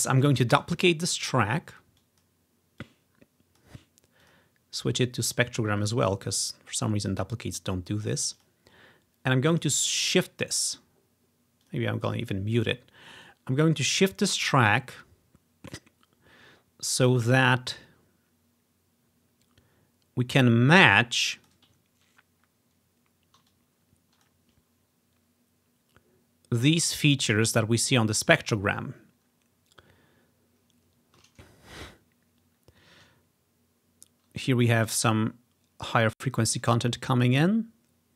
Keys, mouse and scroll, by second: 0.2 ctrl+click, 0.7 ctrl+d, 2.1 click, 2.9 click, 4.3 click, 5.4-9.6 drag, 9.7-11.3 drag, 11.7 click, 13.3-18.9 drag, 20.4-22.9 drag, 22.1-23.1 ctrl+scroll up 1, 23.6-25.2 drag, 29.4 ctrl+scroll down 2, 30.9-32.3 ctrl+scroll down 3, 32.3-33.3 scroll up 1.